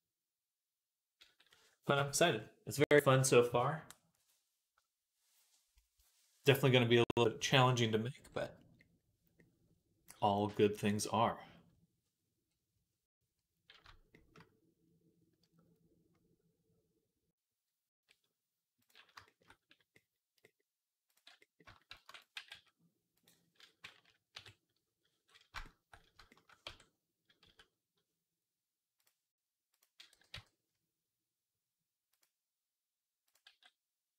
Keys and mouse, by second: 11.5-22.0 right drag, 18.6-21.0 drag, 18.6-21.0 middle drag, 21.8 shift+d, 22.0-26.1 middle drag, 22.2 g, 24.2 KP_3, 26.5 Tab, 29.5 z, 30.0 g, 33.3-34.1 middle drag, 33.3 g.